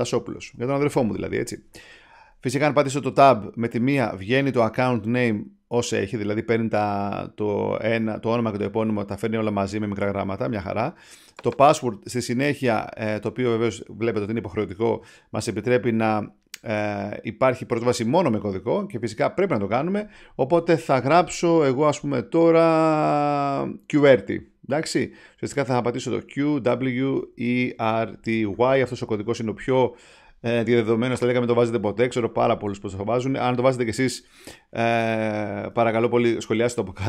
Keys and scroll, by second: 0.0-1.8 typing, 3.7 Tab, 35.6 Tab, 36.8-37.0 typing.